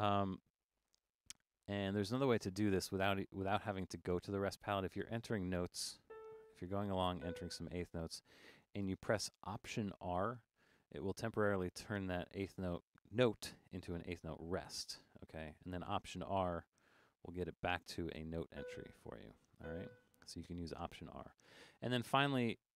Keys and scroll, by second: 10.4 alt+r, 17.2 alt+r.